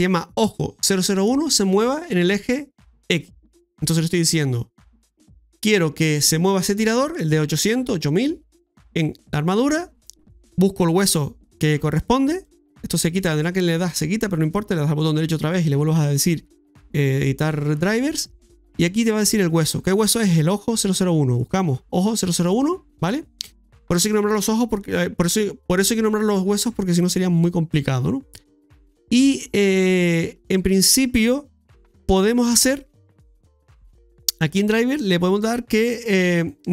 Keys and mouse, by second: 12.4 right click, 14.7-24.0 right drag, 30.5-36.7 right drag.